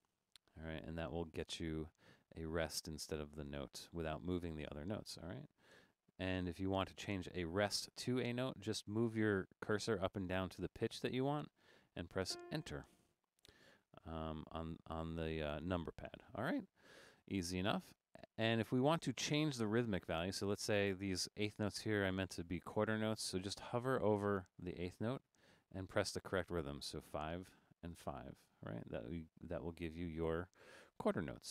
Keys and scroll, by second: 6.3 Down, 6.5 Down, 6.6 Down, 7.0 Down, 8.6 Down, 8.7 Down, 9.0 Down, 9.6 Down, 9.9 Up, 10.1 Up, 18.2 Right, 18.7 Right, 19.5 BackSpace, 20.3 Left, 20.9 Left, 21.7 Right, 22.1 Left, 23.4 Right, 25.2 Left, 26.9 typing, 27.9 typing.